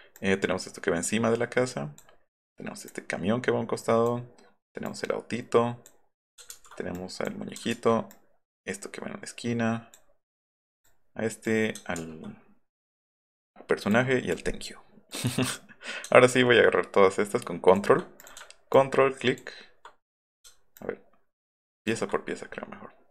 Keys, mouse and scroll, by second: 0.1-2.0 drag, 2.9-4.1 drag, 4.9-5.9 drag, 6.5 ctrl+z, 6.9-7.3 drag, 7.7 ctrl+z, 8.1-9.9 drag, 10.8 click, 12.0 ctrl+z, 13.9 click, 15.1 click, 16.3-17.7 shift+drag, 18.2 click, 18.7 ctrl+click, 20.7 ctrl+click, 21.0 ctrl+right click.